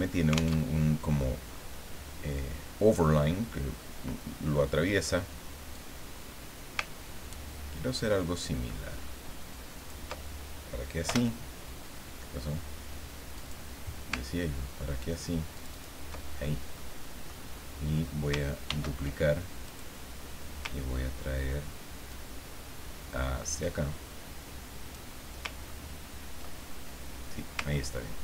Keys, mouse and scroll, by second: 0.6 alt+Tab, 5.8-10.0 drag, 11.1 Return, 13.3 click, 15.5 ctrl+click, 16.7 click, 18.7 ctrl+d, 19.7 click, 22.1-25.1 ctrl+drag, 25.6-26.1 ctrl+scroll up 2.